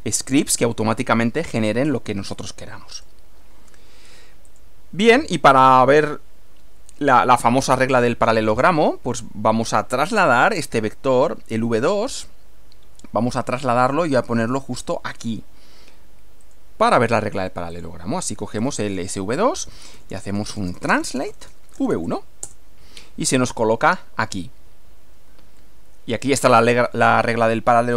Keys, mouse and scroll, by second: 3.0 click, 4.5 click, 5.5 click, 16.4 click, 17.7 click, 18.6-22.4 typing, 22.4 shift+Return, 25.6-27.2 middle drag.